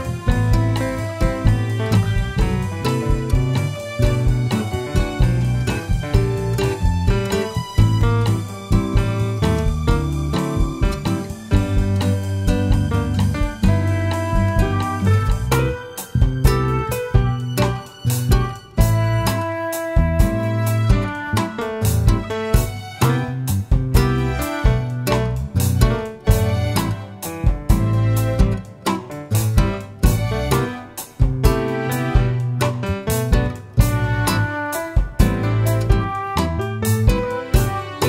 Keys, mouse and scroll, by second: 1.1 ctrl+a, 4.7 click, 5.1-6.8 middle drag, 6.8 click, 7.3-8.4 scroll up 2, 8.4 Tab, 10.1 ctrl+r, 12.8 click, 13.1 shift+middle click, 13.9 ctrl+r, 16.4 click, 17.6 s, 19.3 click, 19.7 ctrl+r, 23.1 click, 23.7-25.4 shift+middle drag, 25.4 s, 27.2 click, 27.7-30.9 middle drag, 30.9 click, 32.6-36.1 middle drag, 34.4 s, 36.1 click, 36.2-36.6 scroll down 1, 37.7-38.0 scroll down 1.